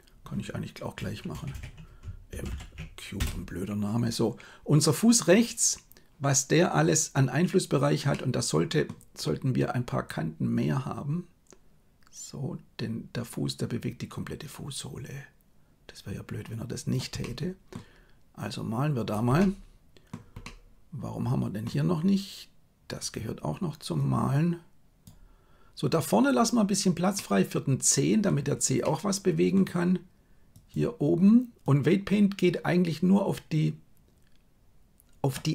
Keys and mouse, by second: 1.5 BackSpace, 2.5 shift+m, 8.0 middle click, 10.2-17.0 drag, 17.2 middle click, 18.4 click, 19.3 middle click, 20.4-21.6 middle drag, 23.0 click, 23.9-25.1 drag, 27.1-28.3 middle drag, 28.8 middle click, 30.5 click, 31.6-35.4 drag.